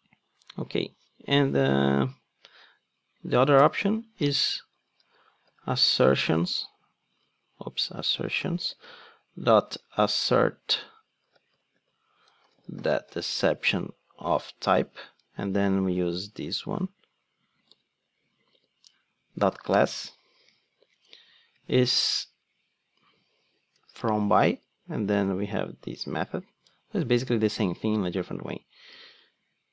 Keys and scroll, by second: 6.5 Return, 7.2 super+z, 14.8 Return, 17.6 Return, 18.5 super+v, 19.7 Return, 23.8 Return, 27.7 super+c, 28.9 super+v.